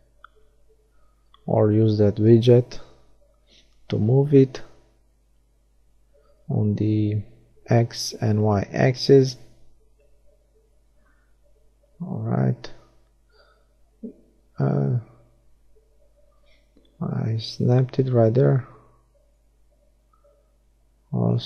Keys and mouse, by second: 2.3 g, 4.4-6.0 drag, 5.9 g, 6.2 middle click, 8.5-9.5 drag, 12.6 right click, 12.6 g, 14.6-16.0 drag, 17.0-20.0 middle drag, 20.0-21.4 drag.